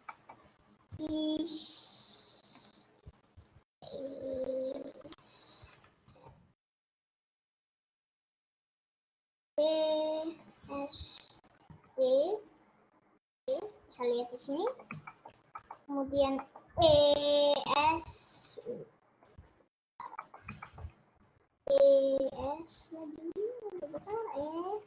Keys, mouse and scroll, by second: 0.1 middle click, 1.1 i, 3.9 e, 5.1 s, 6.1 ctrl+z, 6.3 ctrl+z, 8.2 Left, 9.3 e, 10.7 s, 11.7 e, 14.9-17.0 shift+middle drag, 17.0 e, 18.1 s, 19.4 click, 20.1-21.5 middle drag, 21.5 e, 22.3 s, 23.9 e.